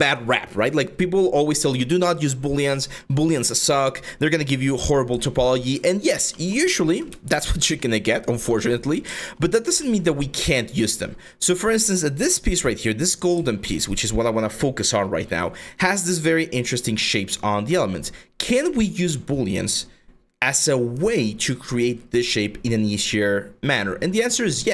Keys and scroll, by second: 7.5 4.